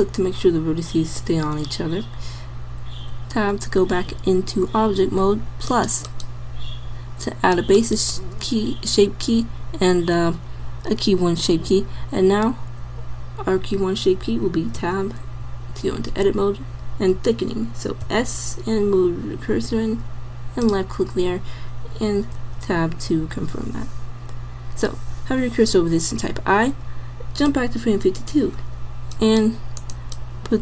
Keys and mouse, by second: 3.1 Tab, 9.6-14.8 middle drag, 14.8 Tab, 18.1 s, 22.5 Tab, 26.3 i, 27.6-29.1 middle drag, 29.2 middle click.